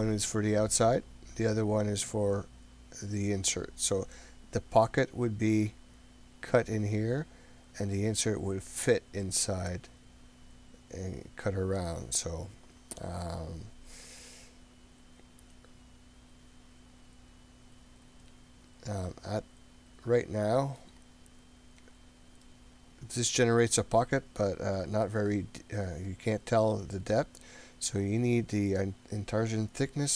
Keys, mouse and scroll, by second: 19.1-20.8 middle drag, 21.1-22.4 scroll down 5, 22.5-25.1 middle drag, 29.4-30.1 drag.